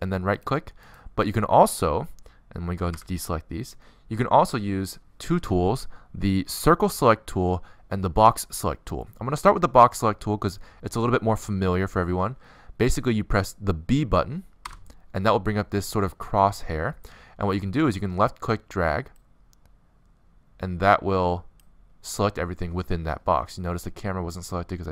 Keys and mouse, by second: 2.9 a, 7.3 c, 8.3 right click, 9.1 b, 13.9 b.